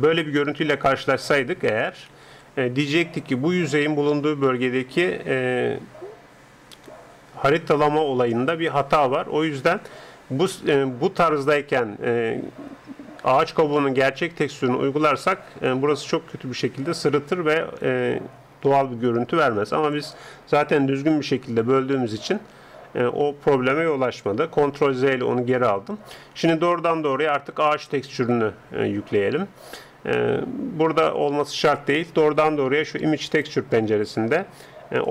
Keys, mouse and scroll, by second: 2.1 ctrl+Up, 6.0-22.1 middle drag, 22.1 ctrl+Up, 24.6 ctrl+z, 32.8-35.1 drag.